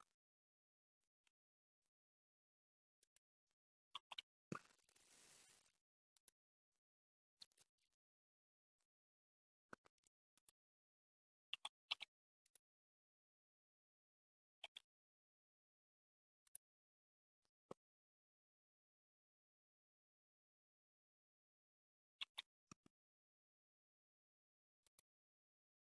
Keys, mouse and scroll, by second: 3.0 click, 3.9 shift+s, 6.1-9.3 drag, 11.5 s, 14.7 g, 22.2 shift+d.